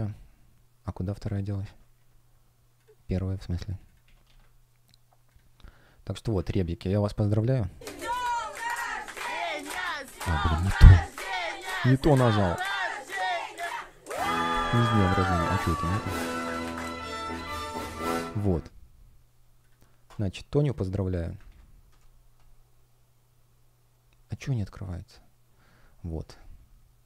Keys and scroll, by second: 3.9 super+a, 4.1 super+c, 6.3 super+v, 8.1 super+v, 8.5 Return, 9.8 super+v, 10.0 Return, 15.6 super+v, 17.2 Return, 21.3 super+v, 21.7 Return.